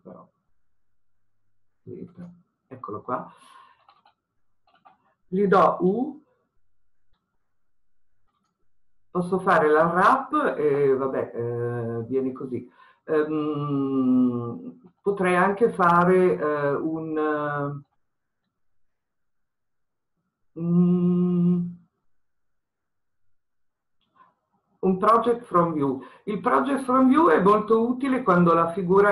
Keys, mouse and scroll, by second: 2.2 click, 3.9-4.7 scroll up 1, 8.7 u, 14.6-16.2 scroll down 1, 16.7-24.0 middle drag.